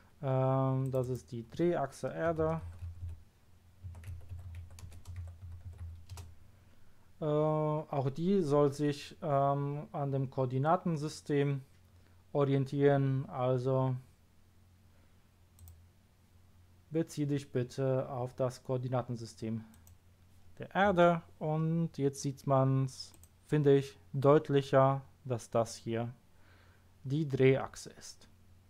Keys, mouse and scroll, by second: 0.8 click, 1.0 click, 2.6-5.7 typing, 6.1 Return, 9.7 scroll down 1, 15.5 click, 19.7 click, 21.5-23.1 scroll up 1, 23.1 click.